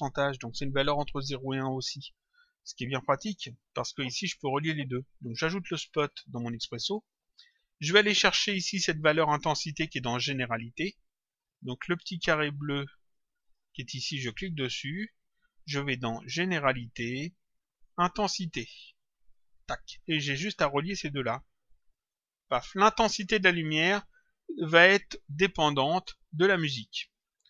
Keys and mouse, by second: 2.9 click, 5.3 click, 6.9 click, 8.0 click, 10.9 click, 13.1 click, 14.2 click, 19.5 click, 21.1 click, 26.3 click.